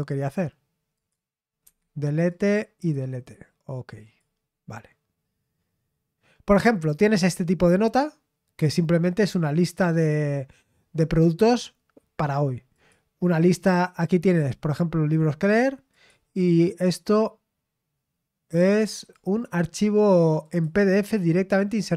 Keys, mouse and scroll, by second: 0.9 click, 1.1 right click, 1.6 Escape, 2.2 click, 3.9 click, 6.9 click, 12.7 click, 15.8 click, 18.6 click, 20.4 click.